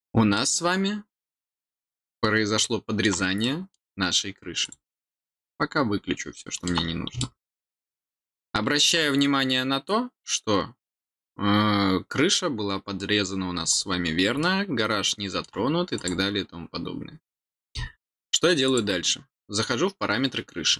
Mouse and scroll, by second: 0.3-3.0 middle drag, 3.3 middle click, 4.6 click, 5.4-6.6 middle drag, 7.1-8.8 middle drag, 13.8 middle click, 14.3-15.4 middle drag, 15.9 click, 18.6 click.